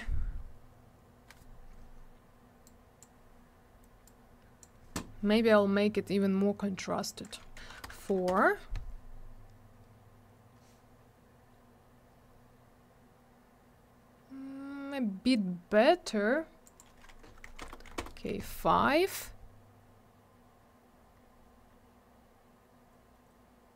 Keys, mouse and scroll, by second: 2.7 click, 4.1 click, 7.1 click, 7.2 click, 7.6 4, 7.8 Return, 8.0 Tab, 8.1 4, 8.3 Return, 11.0-12.2 scroll up 1, 12.4-14.2 scroll down 1, 16.6 click, 16.8 click, 17.5 5, 17.6 Return, 17.7 Tab, 17.9 5, 18.0 Return, 19.6-20.2 scroll up 1, 21.2-21.7 scroll up 1, 21.7-23.0 scroll down 1.